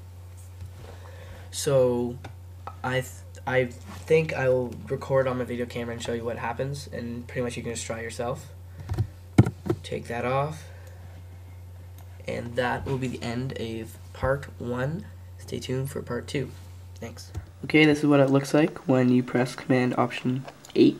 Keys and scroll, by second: 9.4 ctrl+alt+super+8.